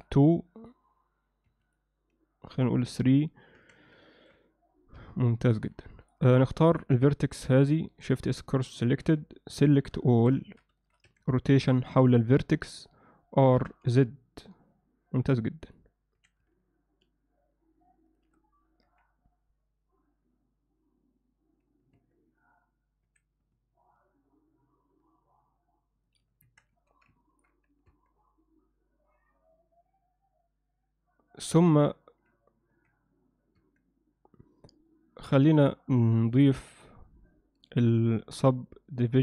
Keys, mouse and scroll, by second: 0.6-1.9 drag, 3.6 Tab, 4.1 ctrl+alt+middle click, 5.0 z, 5.6 ctrl+alt+middle click, 6.2 click, 7.9 shift+s, 9.1 KP_7, 10.1 shift+middle click, 10.5 ctrl+middle click, 10.8 alt+shift+middle click, 11.1 a, 12.1-12.9 drag, 13.6 r, 16.2 s, 18.9 KP_1, 22.0 Tab, 23.1 s, 26.5 Tab, 26.8 z, 27.2 ctrl+alt+middle click, 27.9 Tab, 28.2 z, 32.7 z, 33.6 Tab, 35.5 click.